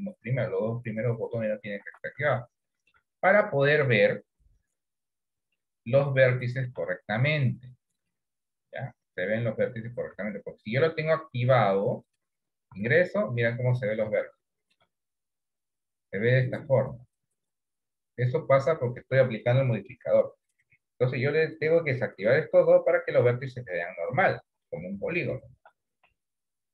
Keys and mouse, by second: 2.0 Tab, 2.5 middle click, 3.3 middle click, 4.5 KP_7, 5.6-6.7 shift+middle drag, 8.0 click, 10.2 Tab, 12.1 click, 12.8 Tab, 14.7 shift+middle click, 21.6 click, 23.3-24.3 middle drag, 25.0 middle click, 26.3 KP_7.